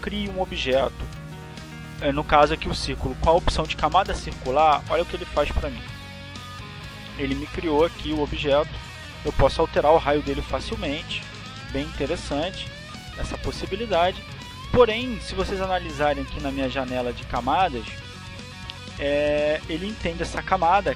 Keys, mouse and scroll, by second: 0.4 click, 8.6-9.7 drag, 11.1 click, 12.2-13.5 drag, 13.9 click, 14.7 click, 15.4 click, 16.2 click, 16.8 click, 17.8 click, 19.4-20.6 drag.